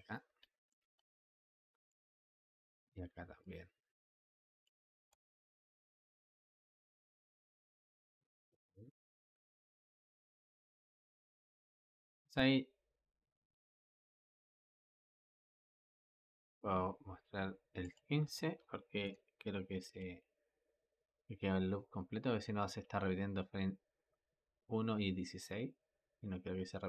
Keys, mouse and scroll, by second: 0.0 scroll down 2, 0.3 shift+middle click, 0.8-1.4 scroll down 6, 1.4-2.6 shift+middle drag, 2.6 click, 3.3 click, 4.9 space, 11.3 space, 11.9-15.0 drag, 17.7-19.7 drag, 19.7 space.